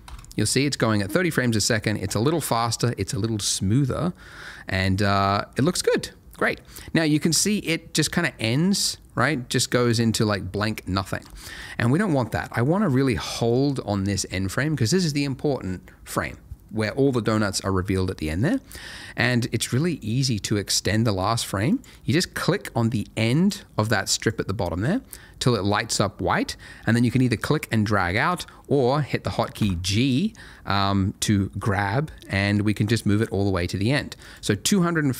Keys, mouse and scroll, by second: 0.4 shift+click, 2.9-5.9 scroll down 1, 9.8 click, 11.2 space, 11.6 click, 21.7 click, 29.5 g, 34.2 click.